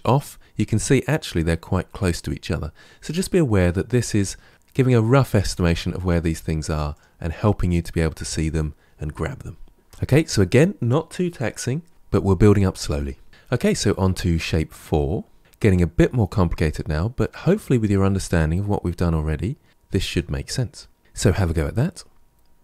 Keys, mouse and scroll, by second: 3.9 click, 6.8 click, 9.9 Tab, 13.3 KP_Decimal, 13.3-16.3 middle drag.